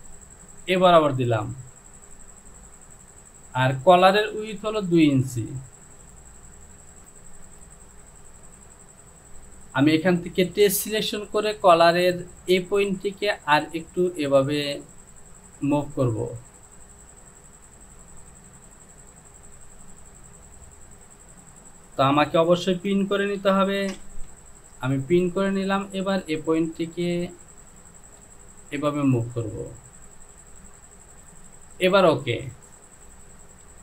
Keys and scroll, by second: 22.7 ctrl+z, 23.9 shift+f.